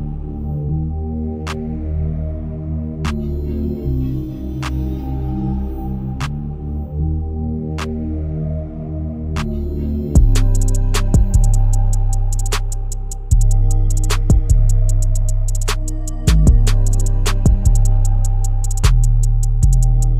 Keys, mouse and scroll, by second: 1.9 e, 3.4-4.0 scroll down 2, 4.0 shift+middle click, 4.5-5.4 scroll down 1, 5.4 scroll down 1, 5.7 g, 7.8-8.7 shift+scroll up 4, 8.7 Tab, 9.4 g, 13.5 click, 13.9-14.7 scroll down 7, 14.7-17.3 shift+middle drag, 17.3 KP_1, 18.0 scroll up 4, 18.3-19.3 shift+middle drag, 19.3 click, 19.7-20.1 scroll up 3.